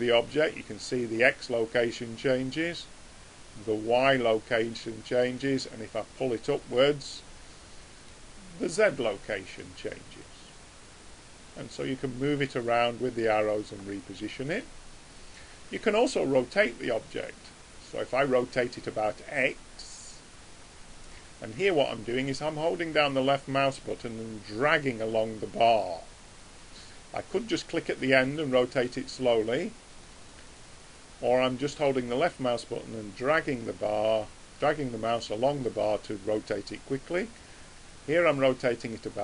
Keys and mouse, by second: 2.9 click, 5.5 click, 6.9-9.7 middle drag, 9.7 click, 12.0 click, 14.1-18.0 middle drag, 18.0 click, 27.5-33.9 drag, 37.5 click.